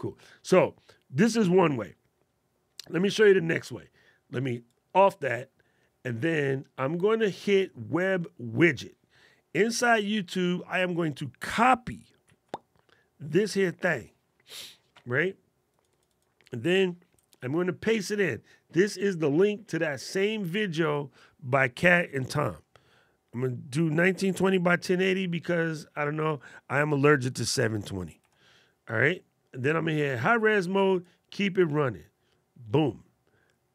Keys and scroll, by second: 12.0 super+c, 17.1 super+v.